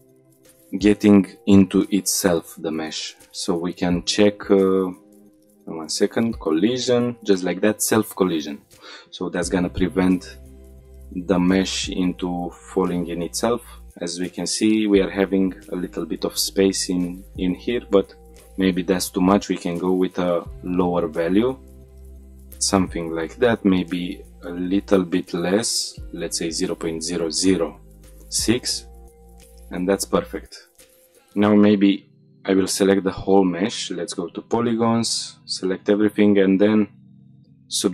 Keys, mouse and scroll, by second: 1.6-2.8 scroll down 7, 3.3-4.0 scroll down 4, 3.9-4.9 scroll up 4, 4.9-6.0 scroll down 3, 6.0 click, 6.0-7.4 scroll down 4, 8.4 click, 10.6 click, 11.3 click, 12.4 click, 12.9 middle click, 13.4-13.8 scroll up 3, 14.0-14.3 shift+middle drag, 15.2 middle click, 17.3 click, 22.0 click, 23.1 click, 29.0 click, 29.3-29.9 scroll down 3, 29.9 middle drag, 30.2 shift+middle drag, 30.5-30.8 scroll down 1, 30.8 scroll up 1, 31.0 click, 31.5 Tab, 32.3 a, 33.7 3, 34.3 a, 35.5-37.2 right drag.